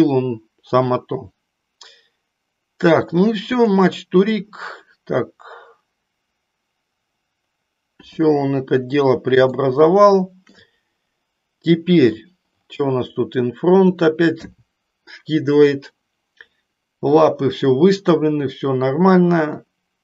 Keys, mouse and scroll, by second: 3.5-6.9 drag, 9.4-10.5 shift+middle drag, 13.9 click, 19.5 middle click.